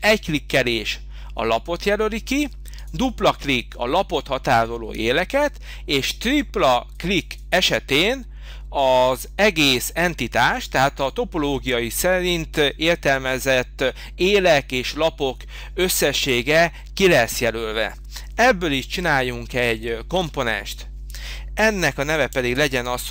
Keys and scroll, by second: 20.2 g.